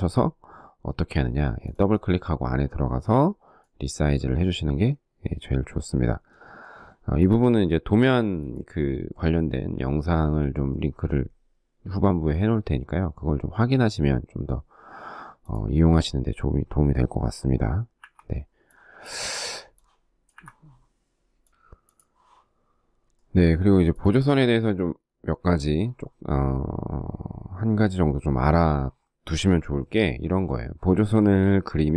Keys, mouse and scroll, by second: 17.4 Delete, 19.7 Delete, 22.6 space, 30.9 ctrl+g, 31.8 shift+middle click.